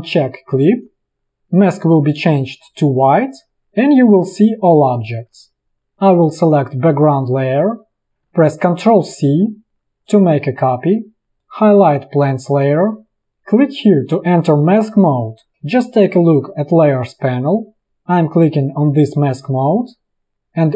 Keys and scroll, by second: 9.1 ctrl+c.